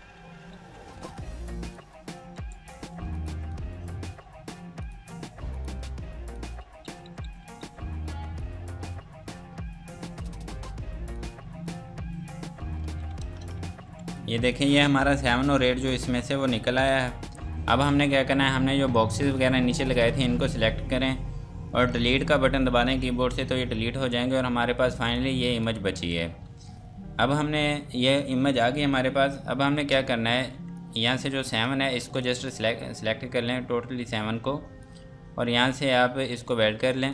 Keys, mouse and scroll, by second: 0.0 Escape, 0.9 click, 1.6 ctrl+click, 2.3 F2, 2.5 click, 4.9 ctrl+click, 5.5 click, 6.6 Escape, 6.8 F3, 8.4 click, 13.2 space, 13.5-13.8 scroll down 1, 13.8 F2, 14.1 click, 17.7-19.2 scroll down 1, 19.2 click, 23.0 Delete, 25.1 click, 25.9 F2, 29.2 scroll up 1, 29.8 scroll down 1, 30.5 F2, 30.7 click, 32.0 F2, 32.2 click.